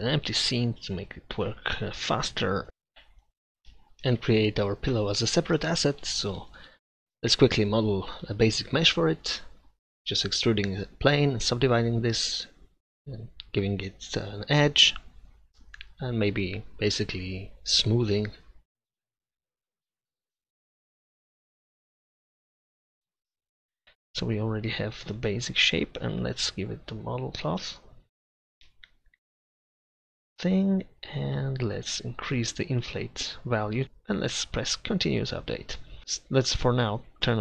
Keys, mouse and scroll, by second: 2.9-4.2 middle drag, 4.2 shift+a, 5.8 Tab, 6.2-7.8 typing, 8.3 ctrl+z, 10.6 e, 15.0 ctrl+r, 15.5 shift+s, 18.5 middle click, 19.0-20.4 middle drag, 20.4-21.5 drag, 21.5 a, 21.9 a, 22.2 w, 23.7 Tab, 27.6-28.2 scroll up 1, 28.2 click, 33.2 click, 35.5 click, 36.9-37.4 drag.